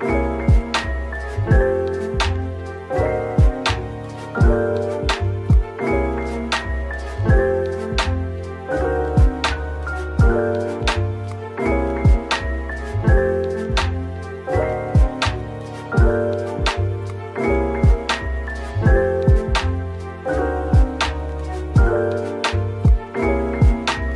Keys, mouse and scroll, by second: 0.6-0.9 scroll down 1, 5.2 scroll down 1, 6.4 scroll down 1, 10.6 scroll down 1, 18.7 scroll down 1, 21.7 ctrl+z.